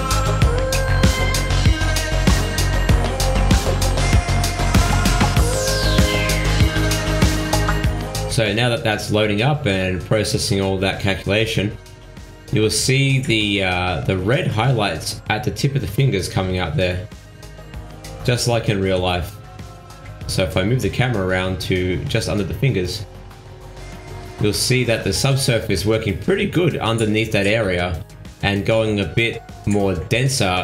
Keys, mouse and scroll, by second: 0.2 middle click, 1.3 scroll up 1, 1.8 ctrl+z, 2.2 middle click, 2.5 shift+middle click, 2.9-3.6 scroll up 6, 3.6 shift+middle click, 3.8 shift+scroll down 1, 4.8 click, 12.2-14.0 scroll down 1, 16.3 middle click, 18.2 g, 21.6 middle click, 22.2 shift+middle click, 22.8-23.1 scroll up 3, 29.0-29.5 scroll down 3, 29.5 middle click, 30.3 shift+middle click.